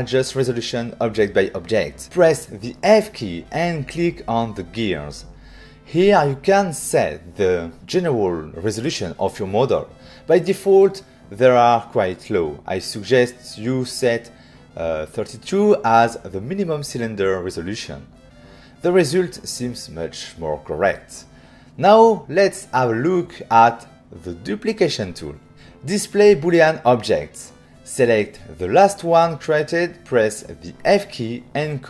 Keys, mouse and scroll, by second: 1.9 f, 3.9 click, 11.3 click, 15.5-15.8 typing, 16.4 Return, 17.7 Return, 22.3 ctrl+middle click, 26.7 <, 29.1 click, 31.4 f.